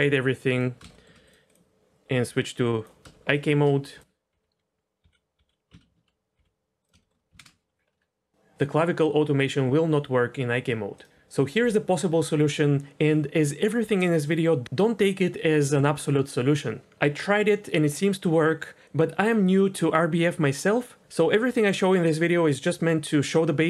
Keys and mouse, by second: 0.5 click, 0.9 shift+drag, 0.9 shift+middle click, 1.3 click, 2.3 click, 3.3 shift+drag, 4.3 h, 5.0 g, 5.3 g, 5.7 ctrl+z, 6.3 g, 7.0 shift+drag, 7.4 ctrl+space.